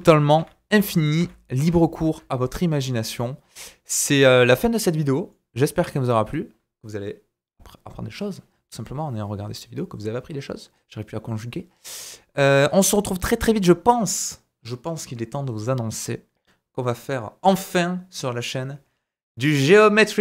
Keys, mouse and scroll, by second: 0.0 ctrl+z, 0.0 ctrl+click, 0.4 ctrl+z, 0.8 ctrl+z, 1.2 ctrl+z, 1.7 ctrl+z, 7.0 middle click, 12.6 scroll up 2, 13.0-13.9 drag, 13.9 scroll down 2, 14.2-20.2 drag.